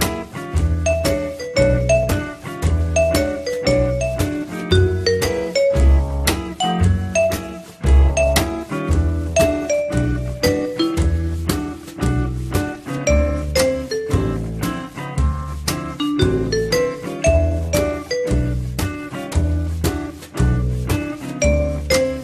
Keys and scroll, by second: 3.1 Delete, 11.5-12.4 typing, 12.7 Return, 21.1 F3.